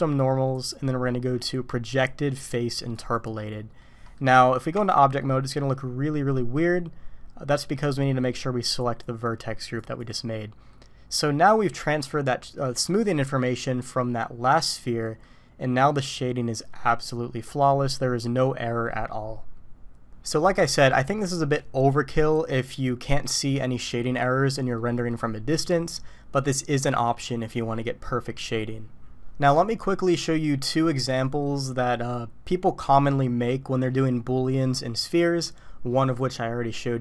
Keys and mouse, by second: 0.5-3.1 drag, 3.8 middle click, 4.7 Tab, 5.2-5.9 drag, 5.9-6.3 middle drag, 6.3-7.7 drag, 8.8-10.0 drag, 10.7-11.7 middle drag, 15.2-20.3 middle drag, 24.8 middle click.